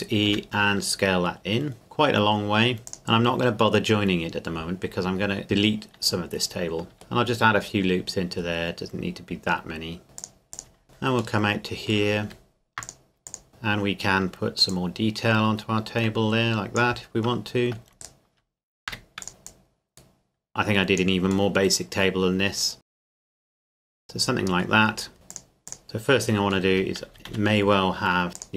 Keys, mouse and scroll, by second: 0.3 s, 2.9 click, 3.0-3.3 scroll up 1, 4.3-5.0 scroll down 1, 5.0 scroll up 1, 5.1-5.5 scroll down 1, 6.9 ctrl+r, 8.4-9.1 scroll down 1, 10.0 scroll up 1, 10.2 click, 11.4 middle click, 12.3 ctrl+r, 13.3 click, 14.7 click, 15.0 click, 18.0 alt+right click, 18.9 e, 19.2 click, 21.5 middle click, 22.8 click, 23.1-23.9 typing, 23.2 middle click, 23.3 click, 23.7 click, 24.0 middle click, 24.9 scroll down 1, 25.1 scroll up 1, 25.3 click, 25.8 Tab, 25.9 middle click, 26.7 Tab, 27.1 a, 27.3 a, 28.3 click.